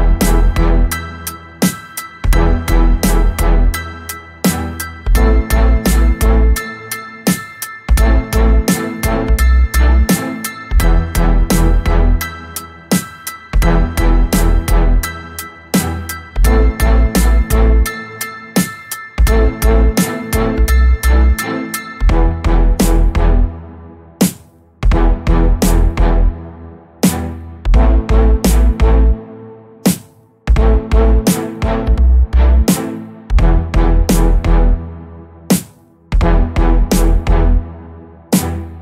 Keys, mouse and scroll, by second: 1.2-6.1 drag, 6.4 click, 7.0-7.3 scroll down 2, 8.1-8.7 scroll up 3, 9.0 click, 9.8 click, 10.8 click, 11.7-13.5 drag, 13.9-14.5 scroll down 3, 15.6 space, 18.4 ctrl+d, 20.5-27.0 ctrl+drag, 27.3 ctrl+space, 32.2 ctrl+d, 33.4 click, 35.0-37.8 ctrl+drag.